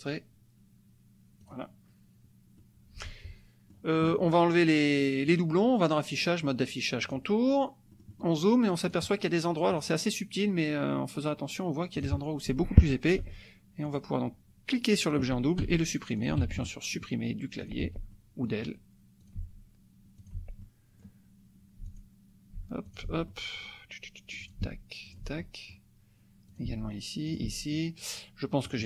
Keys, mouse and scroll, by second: 1.4 click, 2.6-3.9 drag, 5.2 click, 7.2 click, 7.9 click, 8.9 click, 9.8 click, 12.0 click, 13.2 Delete, 13.9 click, 15.6 Delete, 16.2 click, 16.4 Delete, 16.7 click, 17.6 click, 17.8 Delete, 18.1 click, 19.3 click, 19.3 Delete, 20.2 click, 20.3 Delete, 20.6 click, 21.8 Delete, 22.0 click, 22.6 Delete, 22.9 click, 23.3 click, 23.4 middle click, 24.5 click, 24.6 Delete, 25.0 click, 25.3 Delete, 25.4 click, 26.5 click, 26.7 Delete, 27.3 click, 27.5 Delete, 27.8 middle click, 28.6 click.